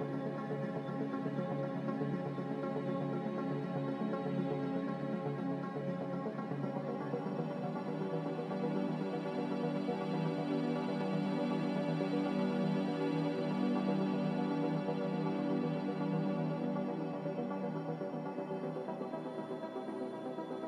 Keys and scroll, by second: 1.2 x, 2.6-3.4 typing, 5.9 z, 7.0 Escape.